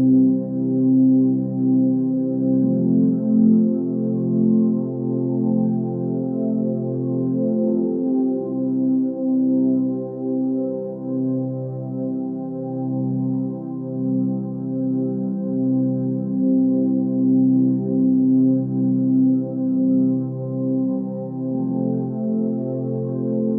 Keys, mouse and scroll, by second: 4.1-5.9 middle drag, 5.9 s, 8.3 click, 8.5 middle click, 8.9 Tab, 9.2-10.4 middle drag, 10.4 Tab, 10.8 middle click, 11.5 alt+click, 12.2 2, 12.7 alt+click, 13.2 alt+shift+click, 13.7 alt+shift+click, 14.3 middle click, 15.1 ctrl+b, 20.2 click, 20.6 middle click, 21.0 Tab, 21.2-23.3 middle drag.